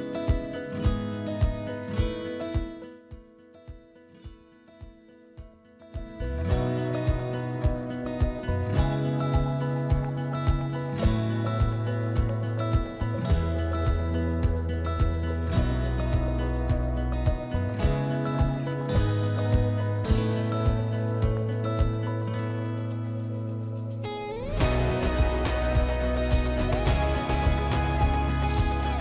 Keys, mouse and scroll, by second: 0.6 click, 0.6 typing, 2.1 click, 4.1 click, 6.0 click, 7.2 click, 10.6 click, 15.7 Delete, 15.7 click, 17.2 click, 20.1 click, 20.9 click, 22.4 click, 23.9 click, 25.8 click, 26.6 click, 28.8 click.